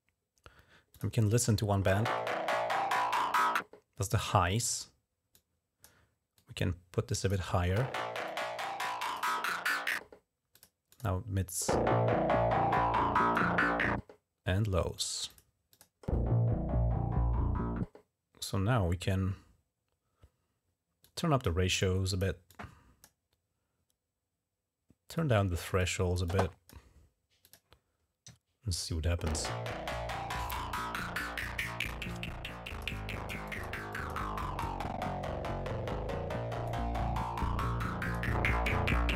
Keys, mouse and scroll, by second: 0.8 click, 5.2 click, 6.2 click, 8.1 click, 10.4 click, 10.8 click, 12.6 click, 14.8 click, 15.1 click, 15.6 click, 20.9 click, 21.6 click, 22.3 click, 25.0 click, 25.6 click, 26.1 click, 27.3 click, 27.5 click, 31.2 click, 31.7-32.7 drag, 32.8 click, 33.3 click, 33.8 click, 34.2 click, 36.5-38.0 drag, 38.2 click.